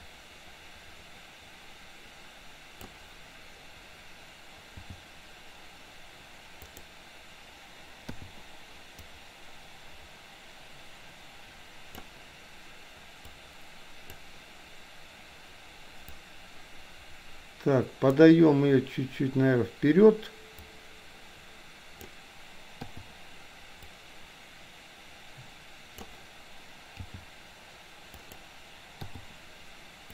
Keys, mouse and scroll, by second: 4.8 g, 8.3 i, 9.1-12.1 drag, 13.4 click, 16.4-18.3 drag, 20.8-22.1 drag, 22.9 i, 24.0-26.3 drag, 27.0 g, 29.1 i.